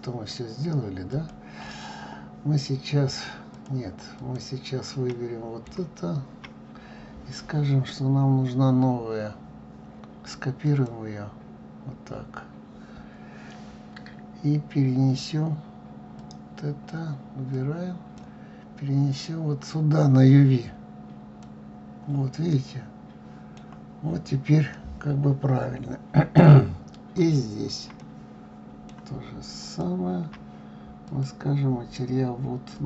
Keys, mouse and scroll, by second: 3.5 click, 4.1 click, 5.1-6.5 middle drag, 8.9-10.7 middle drag, 10.7-16.4 drag, 18.1 click, 21.4 click, 22.7-27.3 middle drag, 27.3 click, 28.2-29.7 middle drag, 29.7 shift+click.